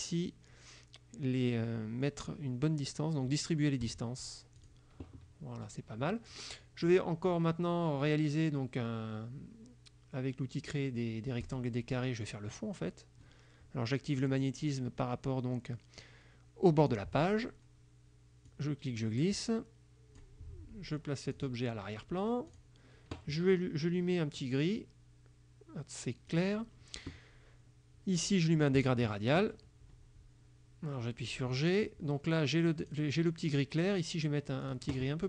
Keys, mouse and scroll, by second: 3.9 click, 4.7 click, 6.9 click, 11.5 click, 14.3 click, 17.0 click, 18.5-20.5 drag, 21.4 click, 22.6 click, 26.4 click, 28.9 click, 31.4 click, 32.9 click, 34.7 click.